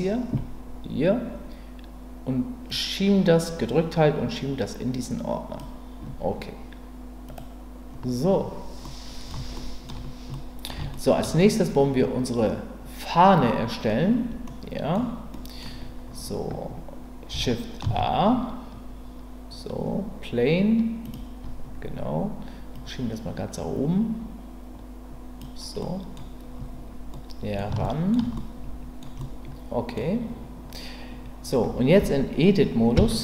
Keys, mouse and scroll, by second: 2.8-5.6 drag, 7.3 click, 8.8-9.9 middle drag, 10.3-10.7 middle drag, 10.9-11.2 shift+middle drag, 14.4 middle click, 15.3 middle click, 17.8 shift+a, 22.7-25.4 drag, 25.8-26.3 scroll up 1, 27.1-27.6 middle drag, 27.8-28.1 shift+middle drag, 28.4-30.0 scroll up 2, 29.0 middle drag, 30.0-32.9 middle drag, 32.9 Tab.